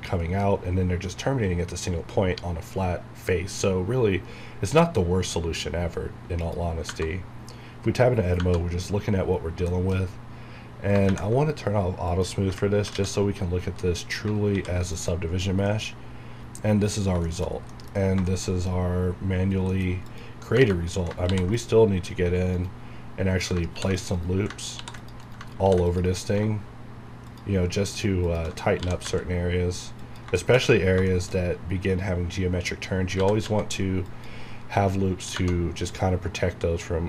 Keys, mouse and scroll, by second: 6.4 click, 6.9 Tab, 9.4 scroll down 1, 9.7 shift+middle click, 11.1 ctrl+`, 12.1 click, 12.9 alt+a, 13.8 middle click, 14.2 scroll down 1, 14.8 alt+v, 14.9 click, 15.4 scroll down 1, 15.7 middle click, 16.9 scroll down 1, 17.5 shift+middle click, 17.7 middle click, 17.9 scroll up 1, 18.3 shift+middle click, 18.5 shift+scroll up 1, 19.7 middle click, 20.0 scroll down 1, 20.1 click, 20.6 Tab, 21.3 ctrl+r, 21.5 ctrl+click, 22.5 right click, 23.5 scroll down 1, 23.7 ctrl+r, 24.1 right click, 24.8 ctrl+r, 25.0 click, 25.2 right click, 25.6 ctrl+r, 25.9 ctrl+click, 26.1 right click, 27.3 alt+shift+click, 28.8 g, 30.0 click, 30.4 shift+middle click, 30.6 scroll up 1, 31.1 shift+middle click, 31.4 scroll up 1, 32.9-33.9 typing, 34.1 click, 35.4 Tab.